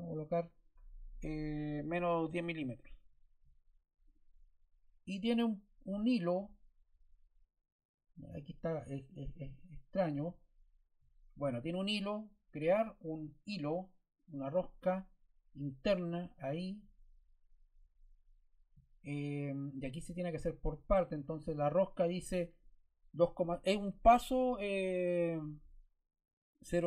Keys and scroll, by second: 2.2 1, 4.6 0.